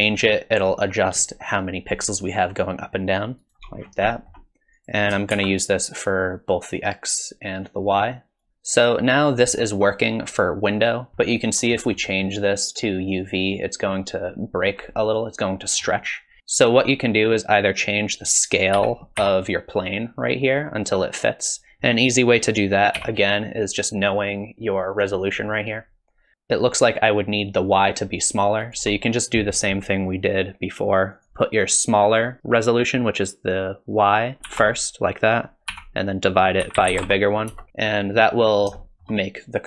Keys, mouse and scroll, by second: 0.0 shift+click, 3.8-4.8 scroll down 5, 4.1 middle click, 4.8 click, 5.3 shift+d, 7.1 click, 8.4 click, 11.1 ctrl+shift+click, 11.1 middle click, 11.2 middle click, 12.1 middle click, 12.9 click, 15.1 middle click, 16.4 click, 18.1 click, 18.8 s, 23.0 n, 31.1 click, 37.8-38.3 scroll up 4, 38.3 middle click, 38.8 shift+middle click.